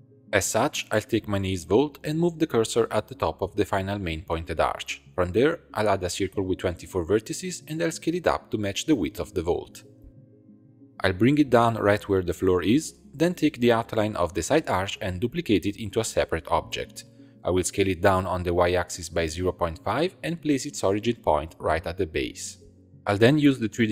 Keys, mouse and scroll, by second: 0.0 Tab, 0.1 1, 0.8 click, 1.5 shift+s, 3.0 shift+middle click, 3.4 Tab, 3.9 shift+a, 6.2-7.6 drag, 7.6 s, 10.9 g, 13.6 2, 14.0 alt+click, 15.0-15.7 scroll down 1, 15.7 shift+d, 16.9 p, 17.6 s, 19.7 1, 19.8 click, 20.6 shift+click, 21.1 shift+s, 22.7 click, 23.0 shift+s.